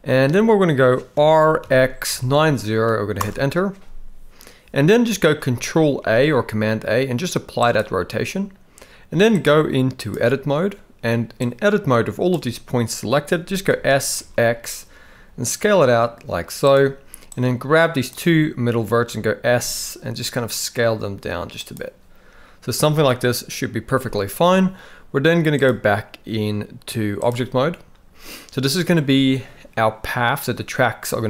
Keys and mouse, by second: 1.2 r, 6.0 ctrl+a, 9.3-10.5 drag, 11.4 click, 13.7 s, 17.3 click, 19.5 s, 25.6-27.3 drag.